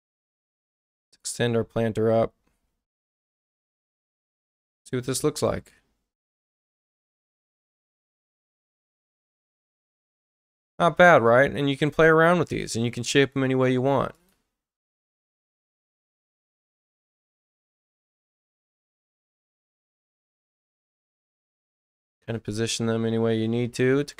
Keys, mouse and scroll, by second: 0.0-1.1 drag, 1.1-2.8 middle drag, 3.5 click, 12.4 right click, 14.1 click, 16.8 space, 17.5 click, 19.4-20.5 ctrl+drag, 22.4 ctrl+click.